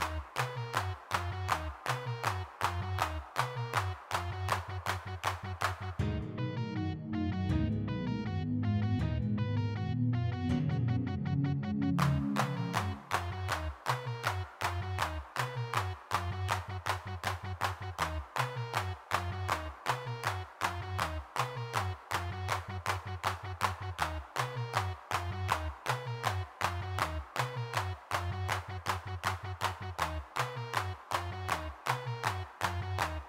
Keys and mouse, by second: 0.1 f, 0.3-1.3 middle drag, 1.3 click, 3.5 middle click, 3.7 click, 4.3-7.0 middle drag, 7.0 shift+c, 7.2 middle click, 8.2 middle click, 8.7 click, 8.9 3, 9.1-11.2 drag, 11.2 middle click, 12.5-22.2 drag, 24.7 g, 24.7 f, 24.8 click, 25.8 click, 27.0-28.3 drag, 28.4 click, 29.5 click, 30.1 click, 30.8 middle click, 31.5 middle click.